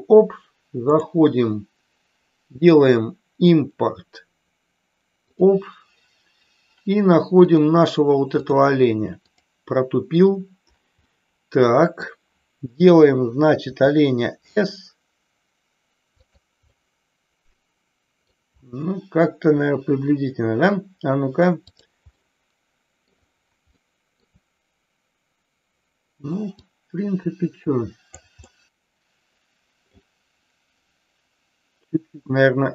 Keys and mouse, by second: 0.9-5.5 drag, 11.0-12.1 middle drag, 13.6 s, 16.1 click, 16.7-18.2 middle drag, 21.6 click, 22.1 middle click, 23.7 middle click, 26.5-28.1 drag, 28.4-29.9 middle drag, 32.6 s.